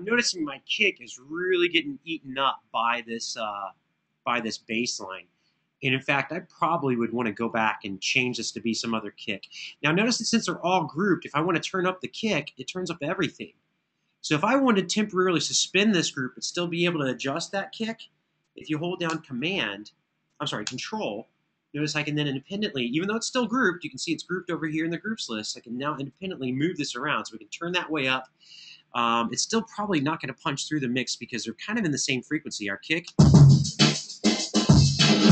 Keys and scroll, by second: 32.8 space.